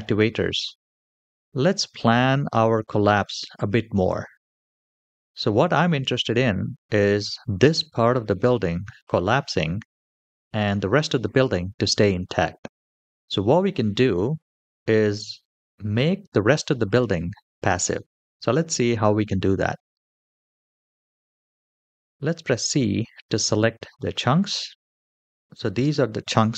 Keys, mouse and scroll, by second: 1.9-2.2 shift+middle drag, 2.6 middle click, 5.1-5.6 scroll down 2, 6.3-6.7 middle drag, 13.3-14.4 middle drag, 14.7-15.1 shift+middle drag, 15.5-16.6 scroll up 2, 18.4 shift+middle click, 19.3 KP_7, 20.5-20.9 shift+middle drag, 21.6 c.